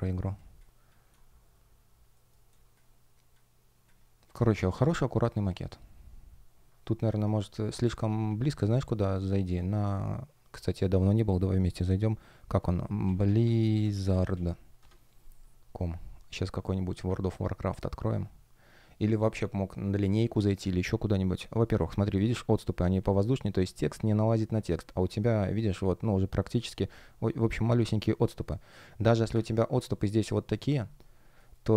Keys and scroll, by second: 0.3 space, 2.0 shift+g, 2.4 space, 7.0 shift+p, 14.7 Return, 30.1 shift+p, 31.2 shift+o.